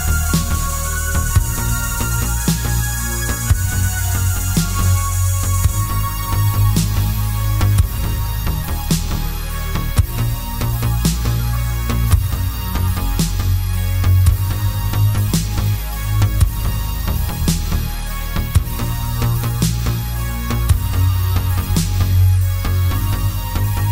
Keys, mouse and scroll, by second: 1.1 click, 1.4 g, 2.8 click, 3.0 middle click, 3.6 shift+z, 3.8 click, 4.1-5.6 middle drag, 5.8 ctrl+click, 6.2 g, 7.3 click, 8.1 g, 9.4 click, 9.5 s, 10.7 click, 10.9-15.3 middle drag, 15.3 click, 15.8 ctrl+click, 16.2 KP_7, 16.9 shift+d, 19.5 click, 19.7-23.9 middle drag, 20.2 scroll up 1, 20.5 scroll down 1, 21.2 z, 21.6 Escape, 22.0 r, 23.6 KP_Enter, 23.8-23.9 scroll up 1.